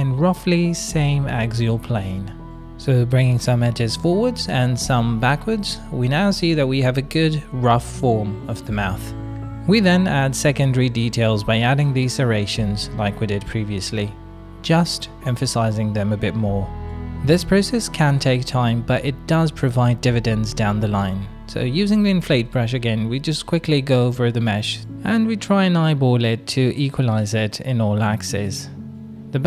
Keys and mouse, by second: 0.5 middle click, 0.9 middle click, 1.6 middle click, 2.8 middle click, 3.2 click, 3.6 click, 4.6 click, 5.2 shift+click, 5.4 click, 5.4 middle click, 7.0 f, 7.4 shift+click, 7.5 click, 9.2 click, 9.6 middle click, 10.1 shift+middle click, 10.2 middle click, 10.8 middle click, 11.8 middle click, 12.9 middle click, 13.3 click, 14.1 middle click, 15.2 middle click, 16.3 KP_1, 17.0 shift+middle click, 17.5 shift+middle click, 18.7 i, 19.3 f, 19.6 click, 20.4 click, 21.1 middle click, 21.2 click, 21.5 middle click, 21.7 click, 22.3 middle click, 22.8 click, 23.4 shift+middle click, 24.2 right click, 24.6 right click, 25.2 middle click, 25.6 right click, 26.0 middle click, 26.5 right click, 26.9 middle click, 27.5 middle click, 27.9 shift+middle click, 28.2 middle click, 28.7-29.4 middle drag.